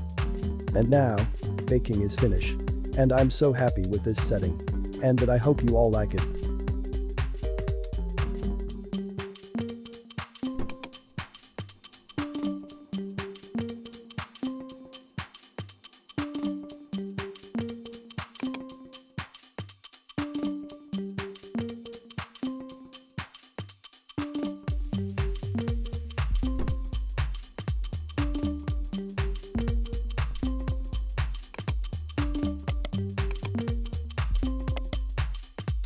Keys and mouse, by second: 10.7 click, 18.4 click, 30.7 space, 31.5 click, 32.7 right click, 33.2 click, 34.7 right click.